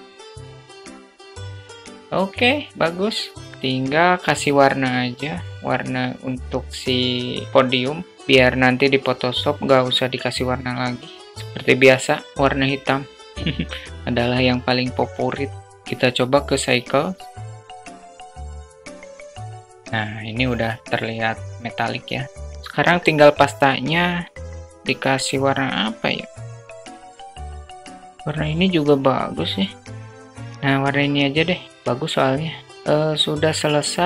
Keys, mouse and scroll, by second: 0.3 click, 0.9 click, 1.2 Tab, 1.5 middle drag, 1.9-2.7 alt+middle drag, 3.7 shift+middle click, 15.6 click, 17.5 middle drag, 18.0-18.6 drag, 24.0 click, 25.6 click, 26.4 click.